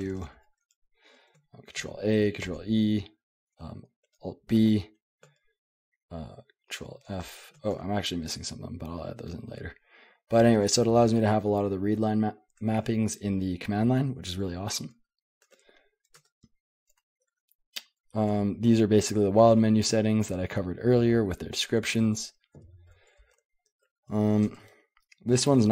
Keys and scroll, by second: 0.0-0.2 typing, 1.5-2.3 typing, 2.4 ctrl+e, 3.8-9.2 typing, 7.7 Escape, 13.7 j, 14.0 j, 14.4 j, 15.4-17.9 typing, 16.2 Return, 19.3-25.7 typing.